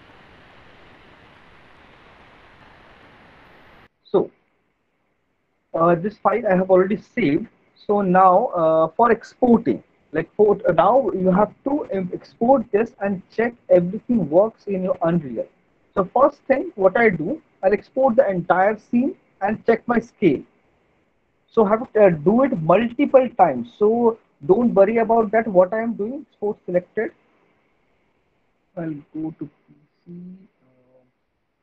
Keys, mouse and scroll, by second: 0.4 middle click, 1.1 click, 1.7 ctrl+z, 2.4 click, 3.2 click, 3.6 Delete, 5.2 alt+middle click, 5.6 middle click, 6.1 alt+middle click, 7.5 middle click, 7.9 alt+middle click, 16.4 middle click, 17.4 click, 20.5 click, 28.2 click, 29.4 click, 31.3 middle click.